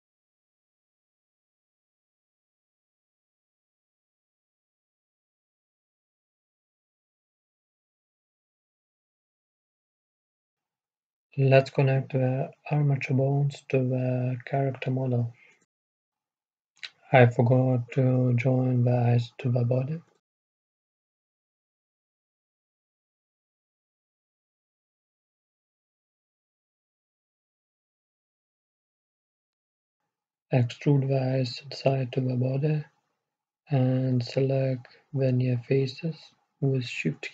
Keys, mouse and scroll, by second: 0.4-2.3 drag, 3.0-5.8 right drag, 3.9-5.8 drag, 7.0-9.9 right drag, 7.9-9.9 drag, 11.0-13.9 right drag, 11.9-13.9 drag, 15.9-20.3 middle drag, 20.3 Tab, 21.8 a, 22.5 Tab, 23.0-25.2 right drag, 25.8-29.7 middle drag, 30.1 Tab, 30.7 middle click, 32.5 middle click, 33.5-37.3 right drag.